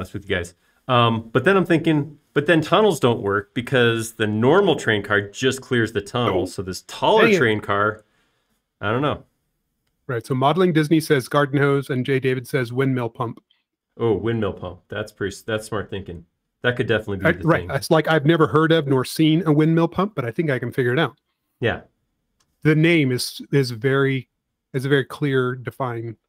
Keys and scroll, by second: 24.1 p.